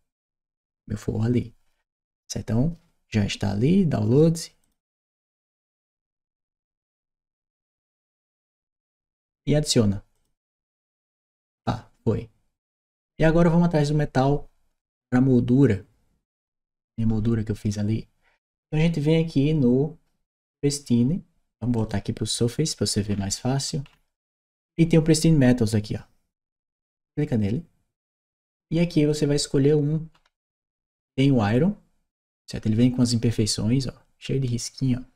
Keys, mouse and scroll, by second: 4.4 click, 9.9 click, 21.5 click, 22.8-24.4 scroll down 2, 26.5 click, 29.9-30.2 scroll down 2, 32.8 click.